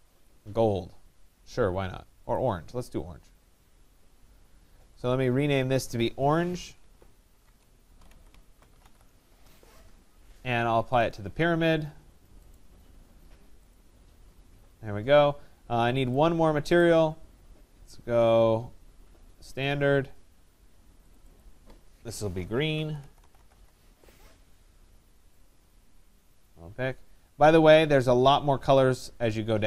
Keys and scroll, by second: 7.0 BackSpace, 8.9 Return.